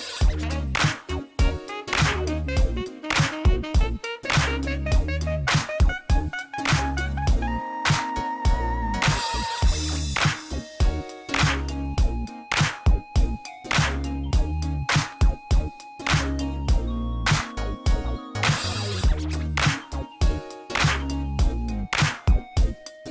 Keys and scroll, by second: 2.1 Tab, 2.9 a, 6.4 2, 6.5 0, 6.8 Return, 8.5 e, 8.7 z, 12.4 Tab, 14.8 Tab.